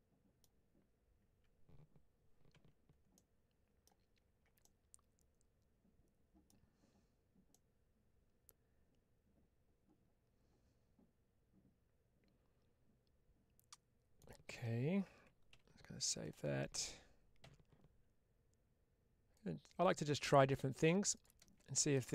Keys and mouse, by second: 3.0 middle click, 4.5-6.3 middle drag, 7.4-14.0 middle drag, 21.8-22.1 middle drag.